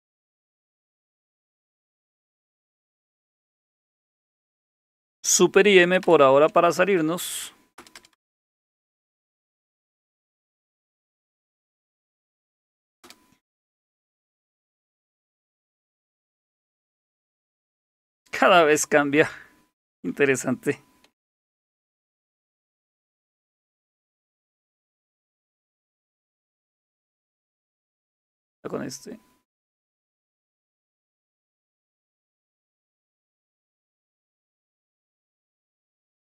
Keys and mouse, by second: 1.4-2.4 typing, 2.9 Return, 6.0 super+m, 7.8 Return, 8.0 Return, 8.1-8.8 typing, 12.2 Up, 13.0 Return, 21.4 super+Return, 24.7-25.9 typing, 28.2 shift+super+e, 32.1 shift+super+e.